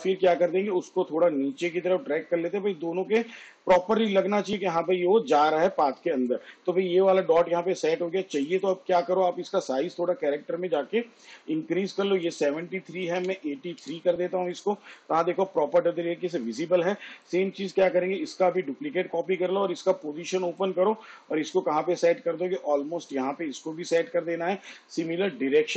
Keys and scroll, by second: 13.4 8, 14.1 3, 18.6 ctrl+d, 19.7 p.